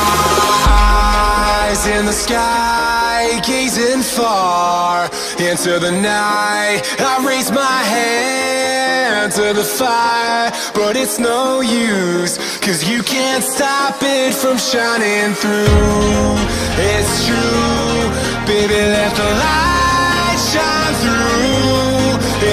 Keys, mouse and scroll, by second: 10.3 b, 13.6 b, 18.5 b, 19.6 b, 21.6 b.